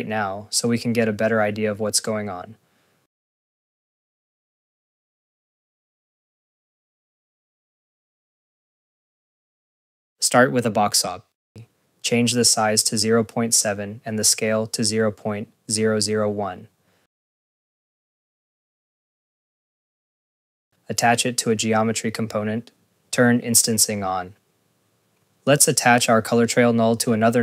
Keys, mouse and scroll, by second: 0.5 scroll, 0.5 click, 1.7 scroll, 1.8 click, 2.5 click, 2.7 scroll, 2.9 click, 3.1 click, 9.1 click, 9.1 scroll, 9.2 click, 9.9 Tab, 10.1 click, 10.8 click, 11.5 scroll, 17.1 scroll, 17.3-19.0 typing, 17.7 scroll, 19.1 click, 19.3 click, 19.5-19.9 scroll, 19.7 click, 19.9 ctrl+s, 20.1 click, 20.3 click, 20.5 right click, 21.8 click, 26.4 click, 27.1 right click.